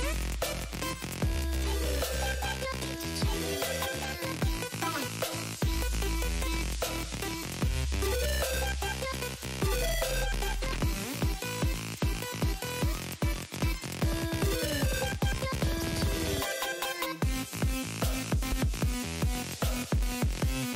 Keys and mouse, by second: 0.1 click, 0.3 click, 0.8 space, 0.9 click, 2.1 space, 2.4 click, 3.7 click, 4.8 click, 6.5 click, 6.9 click, 9.1 click, 10.2 click, 11.0 ctrl+z, 11.2 ctrl+z, 11.3 ctrl+z, 11.5 ctrl+z, 11.7 ctrl+z, 12.3 click, 12.7 click, 13.3 click, 14.1 click, 16.7 space, 16.8 click, 17.1 x, 17.2 click, 17.9 click, 19.2 alt+shift+click, 20.0 Return.